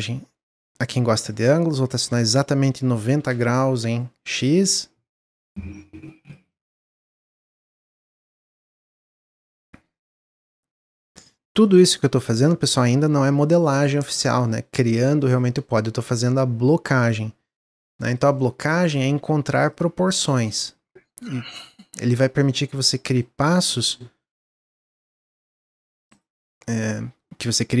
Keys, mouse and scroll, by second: 2.0-4.4 drag, 4.4 middle click, 5.0-6.4 drag, 6.4-7.7 middle drag, 7.7-10.4 drag, 11.3 ctrl+z, 11.7 click, 13.0 middle click, 13.6 scroll up 2, 13.9-15.2 middle drag, 15.2 click, 18.3-19.6 middle drag, 19.6-20.7 drag, 22.3 click, 22.9 middle click, 23.7 shift+d, 26.0 shift+click, 26.3-27.8 middle drag.